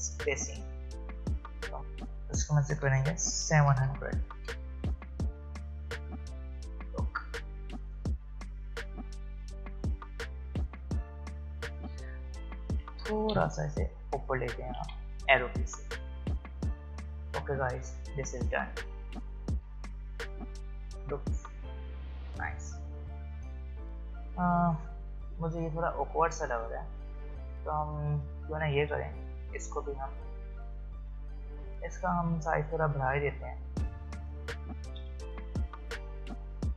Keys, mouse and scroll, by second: 0.8 click, 4.3 Return, 6.7 shift+click, 11.0 click, 12.9 Up, 15.4 click, 16.2-17.5 alt+scroll down 1, 17.5 alt+scroll up 1, 19.9 alt+scroll up 1, 22.2-23.1 alt+scroll down 1, 23.1-23.5 alt+scroll up 1, 26.9 click, 31.4 ctrl+z, 32.3 click, 35.0 v, 36.1 shift+click.